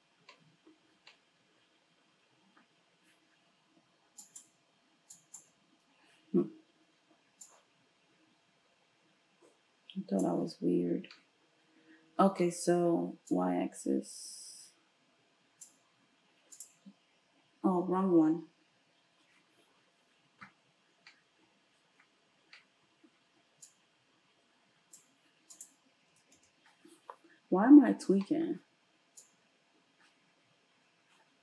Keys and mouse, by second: 4.2 ctrl+shift+click, 4.4 shift+middle click, 5.2 ctrl+shift+click, 5.3-7.5 ctrl+shift+middle drag, 7.5-31.4 drag.